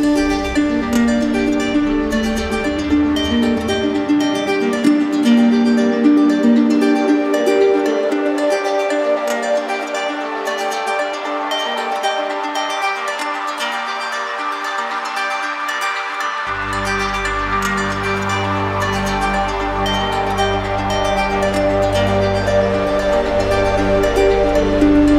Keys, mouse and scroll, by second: 4.0 alt+click, 4.8 right click, 7.1 alt+click, 7.3 ctrl+z, 12.3 alt+click, 13.2 ctrl+z, 18.7 alt+click, 19.6 right click, 20.2 shift+right click, 21.2 shift+click, 21.8 shift+click, 23.1 shift+click, 23.7 alt+right click.